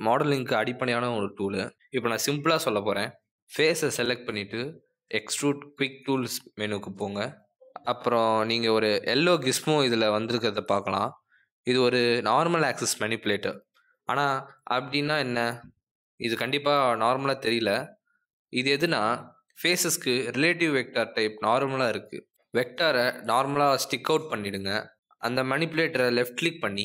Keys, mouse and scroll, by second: 0.7 click, 2.1 click, 4.3 click, 17.7 click, 18.7 click, 20.5 click, 22.4 click.